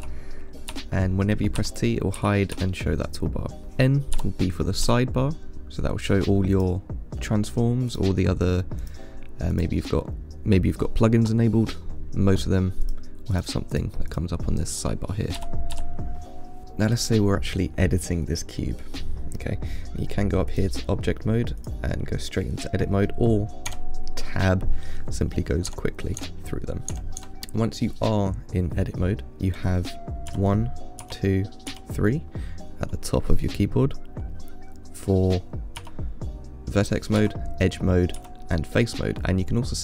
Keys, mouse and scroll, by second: 0.2 t, 1.8 t, 2.4 t, 4.4 n, 5.1 n, 6.8 click, 8.1 click, 9.0 click, 9.8 click, 13.1 click, 13.6 click, 14.0 click, 14.3 click, 15.6 n, 16.0 n, 16.6 middle click, 16.7-17.1 scroll up 1, 17.1 click, 20.7-23.9 drag, 23.9 Tab, 25.9-27.3 Tab, 27.8-30.5 middle drag, 30.5 1, 31.4 2, 37.4 2.